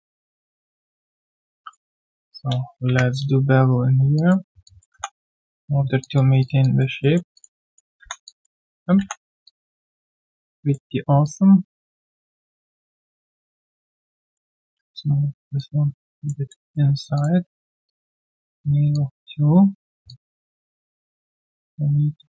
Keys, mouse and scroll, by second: 1.6 double click, 2.8 ctrl+b, 4.6 alt+click, 5.3 right click, 5.7 scroll down 1, 6.0 alt+click, 6.4 alt+click, 7.0 alt+middle click, 7.6 alt+right click, 8.0 alt+1, 8.2 alt+click, 8.6 alt+right click, 9.0 3, 9.0 scroll down 1, 9.4 alt+click, 14.6 w, 16.5 alt+middle click, 17.8 alt+click, 20.1 alt+click.